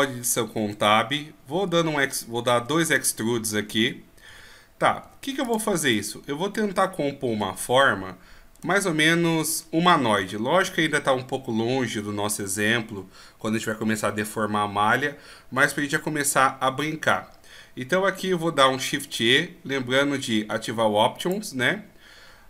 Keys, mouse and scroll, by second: 0.3 scroll down 1, 0.6 e, 5.9 middle click, 7.3 KP_1, 8.3-10.5 scroll up 8, 21.2 click.